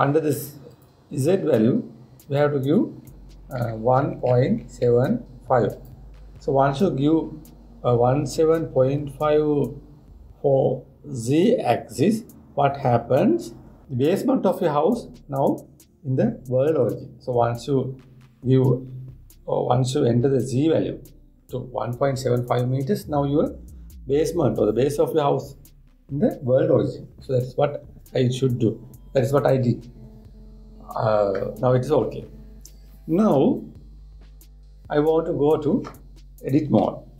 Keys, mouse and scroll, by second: 1.4-4.5 drag.